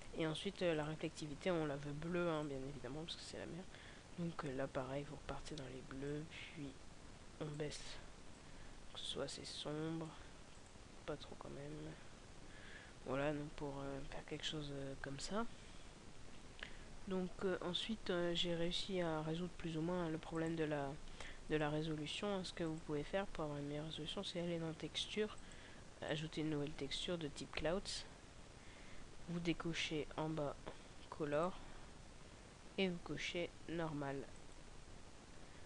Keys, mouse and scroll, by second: 0.8 click, 27.7-28.5 scroll down 4, 28.8 scroll down 2, 29.3-29.7 scroll down 6, 30.3-31.6 scroll down 5, 31.6 click, 34.6 click.